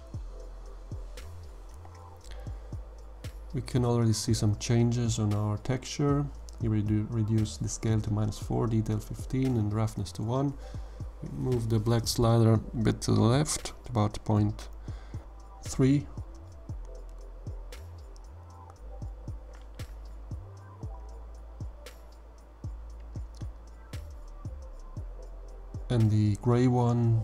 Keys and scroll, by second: 4.2 -, 4.5 4, 5.2 Tab, 5.4 1, 5.6 5, 7.1 1, 7.3 Return.